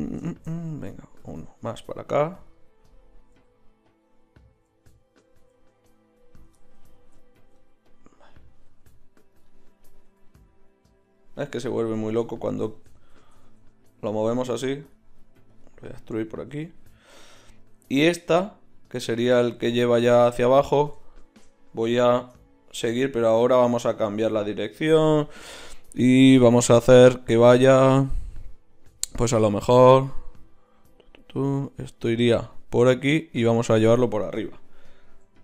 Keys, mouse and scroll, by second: 2.5 click, 3.3 g, 4.5 g, 5.3 g, 7.0 ctrl+z, 8.7 g, 9.9 g, 12.2 ctrl+z, 12.4 ctrl+z, 12.6 ctrl+z, 12.8 ctrl+z, 13.1 ctrl+z, 13.3 ctrl+z, 13.5 ctrl+z, 14.9-16.7 right drag, 17.9-20.7 middle drag.